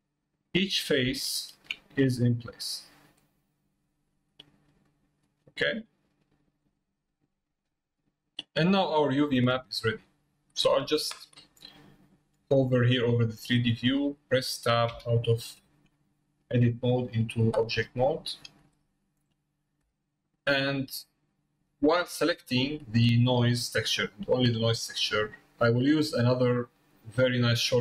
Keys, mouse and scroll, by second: 1.3 shift+middle click, 2.6 click, 3.2 click, 4.9 middle click, 6.6 middle click, 7.4 scroll down 1, 10.0-10.4 scroll down 1, 12.9 click, 16.0 middle click, 18.1 shift+middle click, 19.3 middle click, 20.0 middle click, 20.5 middle click, 21.4-23.0 drag, 23.4 middle click, 24.0 click, 26.5 click, 27.7-27.8 middle drag.